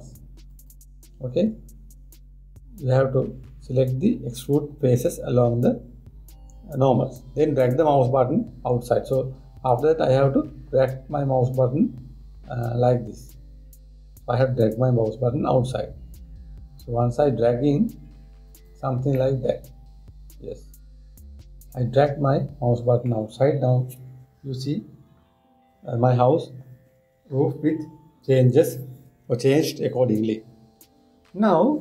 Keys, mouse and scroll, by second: 19.8-22.8 middle drag.